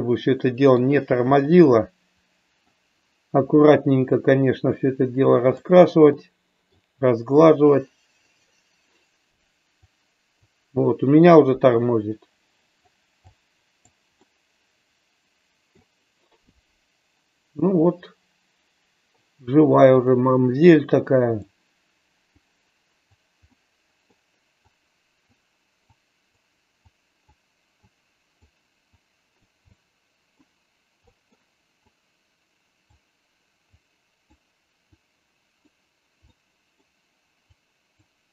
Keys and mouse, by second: 1.3-2.7 middle drag, 13.2 click, 14.2-15.7 middle drag, 20.0-21.5 drag, 22.3 click, 23.5 middle click, 24.6 click, 25.8 click, 26.8 click, 27.8 click, 29.0 click, 29.6 middle click, 31.0 middle click, 31.8-32.8 drag, 33.7 click, 35.0 click, 36.2 middle click, 37.5 click.